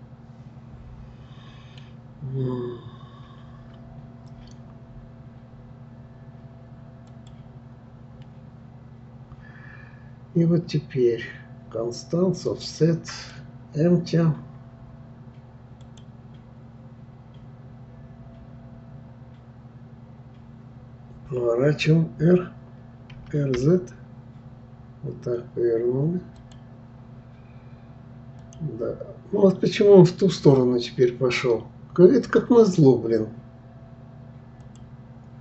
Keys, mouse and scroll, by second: 7.1-10.1 drag, 12.5 click, 13.1-16.2 drag, 28.4 click, 34.6-35.1 drag.